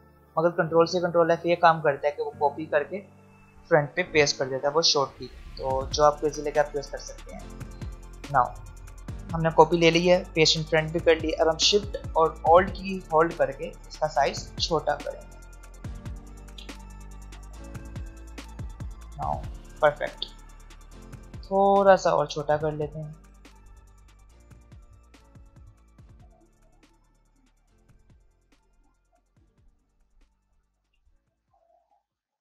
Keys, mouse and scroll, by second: 3.8-7.8 alt+shift+drag, 8.5 alt+scroll up 2, 9.8-10.3 alt+scroll up 1, 10.6-11.9 scroll up 1, 11.9 click, 12.8 alt+scroll down 2, 15.5 click, 18.3-22.1 alt+shift+drag, 23.0 alt+scroll down 1, 24.4 alt+scroll down 1, 25.0-27.8 drag, 30.5 click.